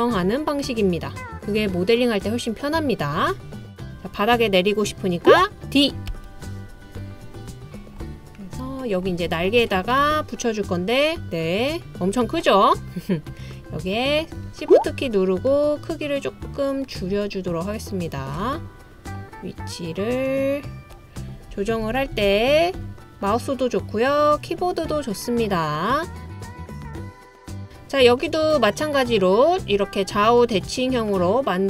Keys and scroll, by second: 6.1 d, 21.5 Page_Down, 21.8 Page_Down, 22.1 Page_Down, 22.3 Page_Down, 22.8 Page_Down.